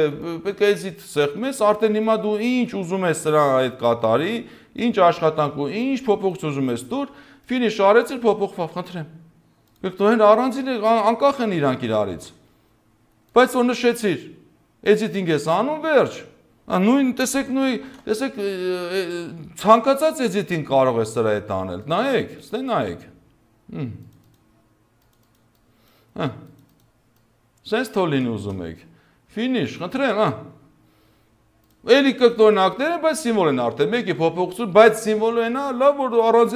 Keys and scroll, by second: 11.7 ctrl+z, 17.8 ctrl+q, 28.2 space, 33.8 ctrl+z, 35.4 ctrl+z.